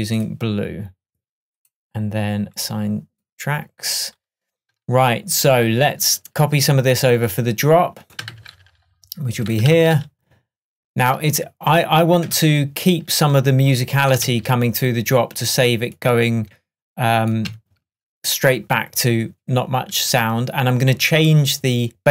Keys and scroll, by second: 8.4 super+c, 9.8 super+v, 12.3 BackSpace, 14.3 super+d.